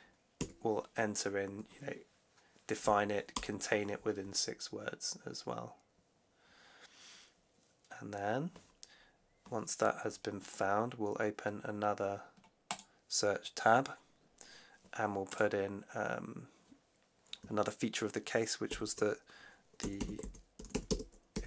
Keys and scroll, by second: 0.3 6, 3.2 Return, 18.6-21.4 typing.